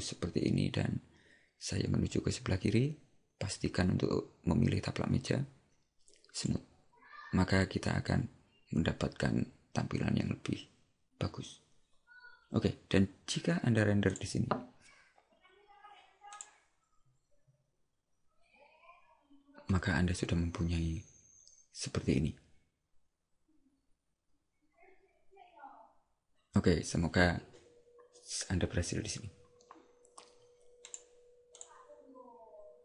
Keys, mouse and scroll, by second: 6.5 click, 14.2 click, 31.7 click.